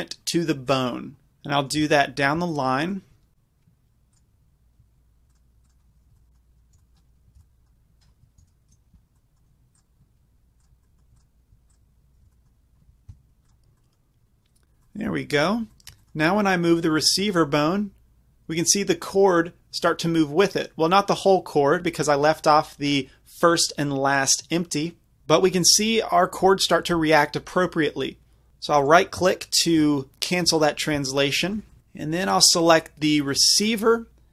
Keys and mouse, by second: 4.1-6.8 drag, 6.1 b, 6.8 b, 7.4 b, 8.4 ctrl+p, 9.8-13.1 drag, 12.2 b, 13.1 ctrl+p, 16.8-18.8 right drag, 17.6 g, 28.9-30.1 right drag, 31.2-32.3 middle drag.